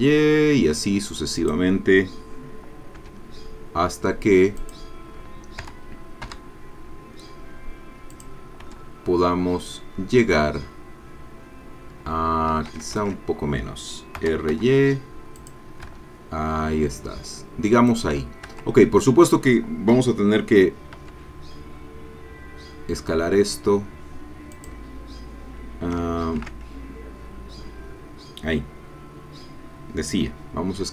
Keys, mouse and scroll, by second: 1.4 click, 3.0 e, 4.6 click, 5.6 r, 6.3 y, 8.1 click, 8.6 e, 12.5 Escape, 13.0 ctrl+z, 14.2 r, 14.5 y, 15.4 click, 15.8 e, 17.9 click, 18.5 Tab, 20.9 s, 24.5 click, 26.2 ctrl+z.